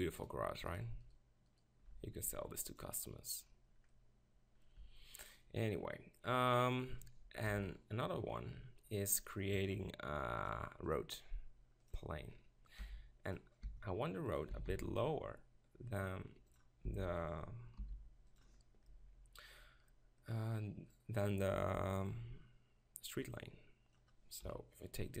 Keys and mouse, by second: 0.9-3.9 right drag, 2.8-4.3 drag, 4.3 middle click, 4.9 Tab, 7.4 KP_7, 11.9 drag, 12.8 g, 13.4-16.0 drag, 13.7 s, 14.6 s, 16.5-20.1 drag, 16.9 s, 20.3-22.4 middle drag, 20.9-24.0 drag, 24.4 KP_1.